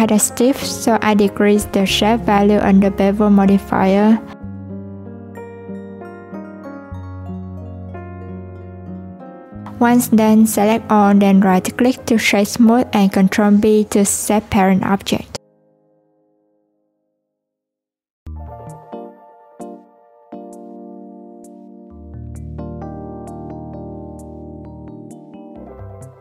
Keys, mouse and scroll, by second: 2.6 click, 3.5-6.0 drag, 6.9-8.9 drag, 9.4-9.9 scroll up 2, 9.9 click, 10.4 shift+click, 11.8 shift+click, 13.4 right click, 15.1 shift+click, 16.2 ctrl+p, 17.8 click, 18.6 Tab, 20.5-22.8 drag, 24.2-25.4 drag.